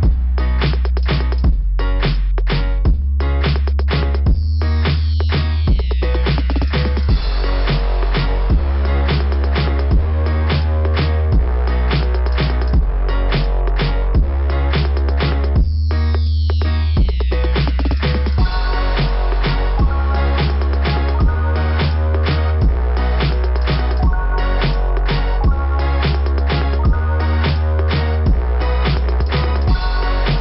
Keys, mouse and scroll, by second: 0.0 w, 2.5 Return, 5.6 click, 5.7 click, 5.9 click, 6.1 click, 7.7 click, 9.3 click, 9.4 click, 11.0 click, 11.2 click, 12.0 click, 12.2 click, 14.5 click, 14.6 click, 14.7 click, 14.8 click, 15.3 click, 15.4 click, 15.4 click, 15.5 click, 15.9 click, 16.0 double click, 16.0 double click, 16.2 double click, 18.0 click, 23.0 click, 26.9 click, 28.1 click, 30.3 click.